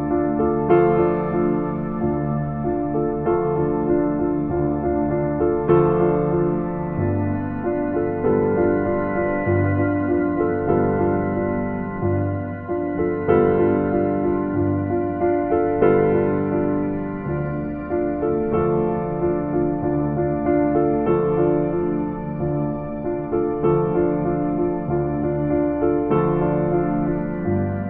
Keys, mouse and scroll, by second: 0.2-0.7 scroll up 1, 2.0-2.4 scroll up 1, 2.4 scroll down 1, 2.6-3.0 scroll up 1, 3.3 right click, 4.2 scroll down 1, 4.4 scroll up 1, 4.5 scroll down 1, 9.6 scroll up 1, 9.9-10.3 scroll down 1, 18.4 scroll down 1, 18.6-19.1 scroll up 1.